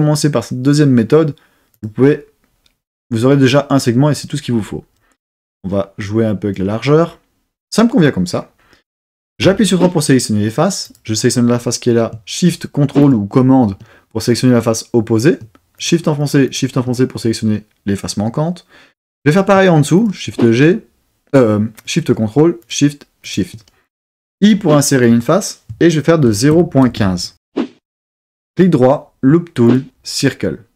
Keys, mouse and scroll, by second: 1.7 click, 5.1-6.5 drag, 9.4 3, 10.8 click, 13.0 shift+super+click, 15.8 shift+click, 20.0 shift+click, 21.7 shift+super+click, 22.6 shift+click, 23.2 shift+click, 24.3 i, 26.2 shift+KP_0, 26.5 shift+KP_Decimal, 26.8 shift+KP_1, 27.0 shift+KP_5, 27.5 KP_Enter, 28.5 right click.